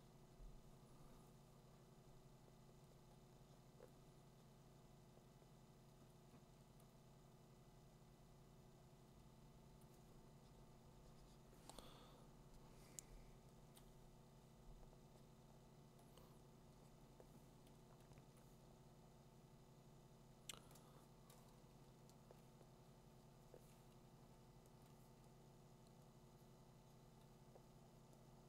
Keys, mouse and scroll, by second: 6.7 click, 9.8 click, 12.8 click, 16.7-22.2 drag, 22.4 ], 24.8 click.